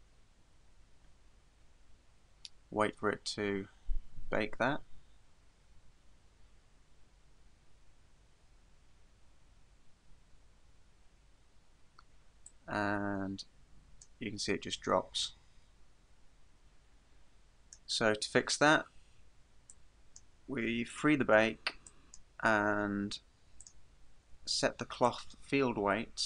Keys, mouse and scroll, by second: 12.5 click, 14.4-15.2 scroll down 1, 15.2 click, 15.2-16.0 scroll down 1, 19.7 click, 20.9 click, 21.9 click, 23.6 click, 25.1 click.